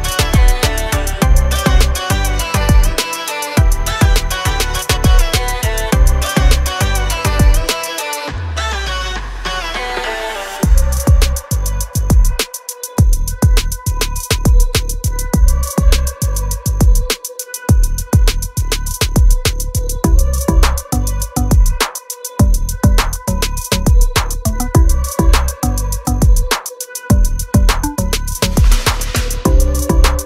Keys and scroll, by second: 0.7 m, 1.6 Up, 2.5 3, 2.7 Return, 4.0-6.3 typing, 4.4 Return, 6.5 Return, 12.3 space, 13.4 f, 14.3 2, 14.7 Return, 15.3 space, 18.6 f, 19.4 2, 19.7 Return, 20.0 space, 20.1 Escape, 23.0 Delete.